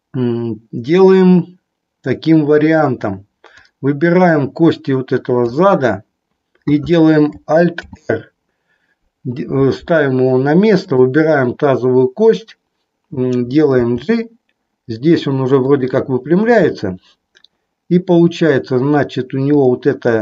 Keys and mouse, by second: 3.6-5.6 drag, 7.7 alt+r, 10.8-11.8 drag, 13.8 g, 19.5-20.2 drag.